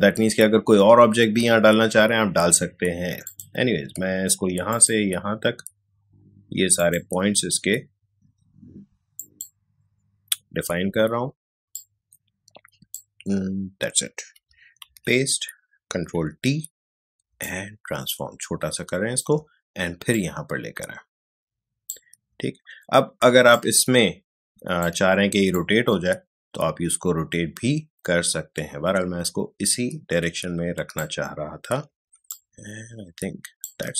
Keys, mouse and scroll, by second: 3.2 click, 9.1 click, 11.7-14.9 drag, 14.9 ctrl+v, 17.4-23.5 alt+shift+drag, 23.5-32.3 alt+shift+drag, 32.3-33.9 alt+shift+drag.